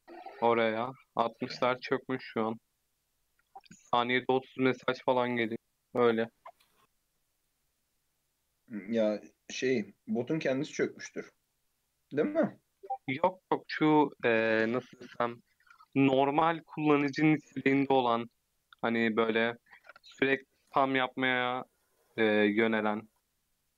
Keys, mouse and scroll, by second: 0.6 click, 1.1 click, 1.5-2.4 middle drag, 2.4 click, 3.4 scroll down 1, 3.6-6.6 middle drag, 6.7 click, 7.3 click, 7.7 click, 8.4-11.3 middle drag, 11.3 click, 12.1-12.7 scroll up 1, 12.8 ctrl+r, 16.1 ctrl+r, 17.7 ctrl+b, 19.7 ctrl+r, 20.6 ctrl+b.